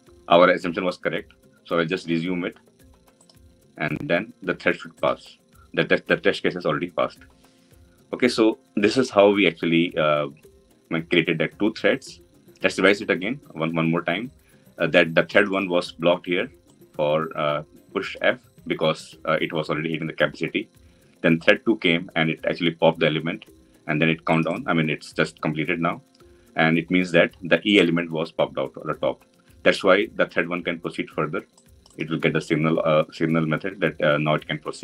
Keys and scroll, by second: 3.1 F9.